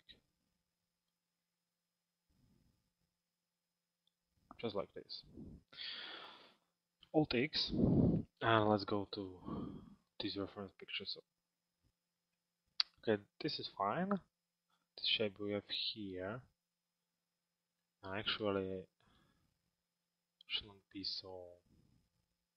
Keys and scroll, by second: 5.4 p, 7.1 alt+x.